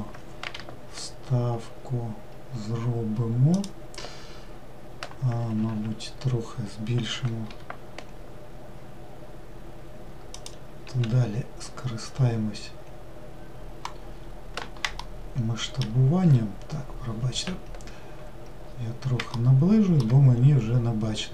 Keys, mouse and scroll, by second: 18.4-19.0 scroll up 1, 19.0-20.1 shift+middle drag, 20.1-20.7 scroll up 2, 21.1-21.3 shift+middle drag.